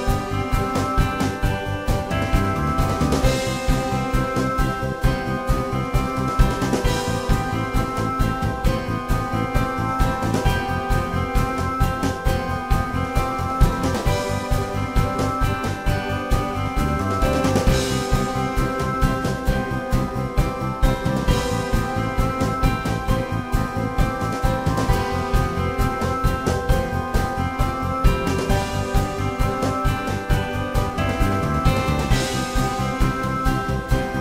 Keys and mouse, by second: 0.3 click, 1.8-2.1 drag, 3.0 y, 3.4 f, 4.0-4.4 drag, 7.3-9.2 drag, 10.4 drag, 10.4 middle drag, 11.1 click, 11.3-12.3 middle drag, 12.3 click, 12.4-13.6 middle drag, 13.6-15.5 drag, 15.1 middle drag, 15.5 middle click, 15.6-16.1 drag, 16.1 middle drag, 16.2-19.1 drag, 21.2-22.3 drag, 21.3 h, 22.1 g, 23.2-25.3 drag, 26.9-29.7 middle drag, 30.2-31.4 middle drag, 32.2 middle drag, 33.4 y, 34.1-34.2 drag.